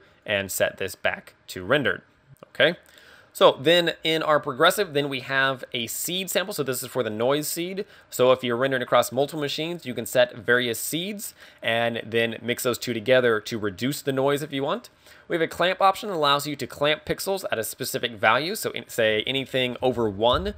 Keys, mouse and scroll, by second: 0.3 click, 19.2 ctrl+click.